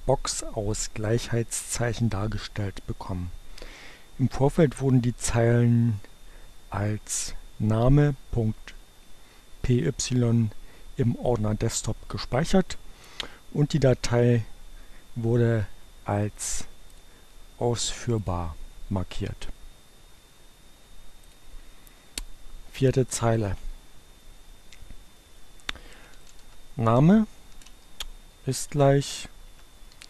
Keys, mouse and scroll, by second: 16.0 right click, 16.9 click, 18.1 click, 21.1 click, 25.4-30.0 typing.